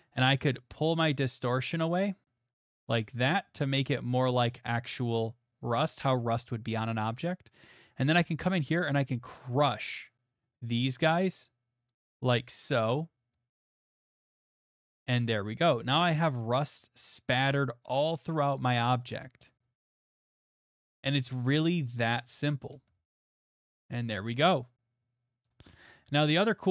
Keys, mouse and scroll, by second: 2.9 right click, 3.9 right click, 4.4 right click, 6.3 middle click, 10.5 click, 12.8 click, 14.2 click, 14.7 middle click, 14.8 middle click, 14.8 middle click, 14.8 middle click, 15.9 middle click, 16.0 middle click, 16.0 middle click, 16.0 middle click, 16.1 middle click, 16.7 middle click, 19.0 click, 20.6 click, 20.8 middle click, 20.9 middle click, 20.9 middle click, 21.6 middle click, 21.7 middle click, 21.8 middle click, 22.0 middle click, 22.0 middle click, 22.5 middle click, 23.0 shift+middle click, 23.7 middle click, 25.4 middle click, 25.7 shift+middle click, 25.9 shift+middle click, 26.0 middle click.